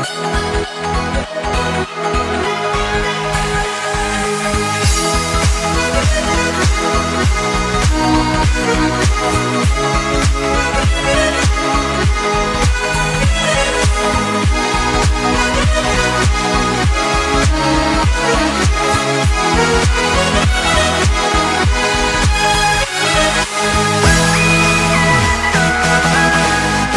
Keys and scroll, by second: 0.3 ctrl+z, 0.5 space, 0.8 space, 4.5 space, 6.1 space, 6.9 space, 8.0 space, 8.4 ctrl+z, 8.5 x, 10.3 ctrl+z, 12.6 ctrl+z, 14.0 space, 18.1 space, 18.8 space, 20.3 space, 20.7 space, 23.1 space, 24.5 space, 25.1 space, 26.6 ctrl+0.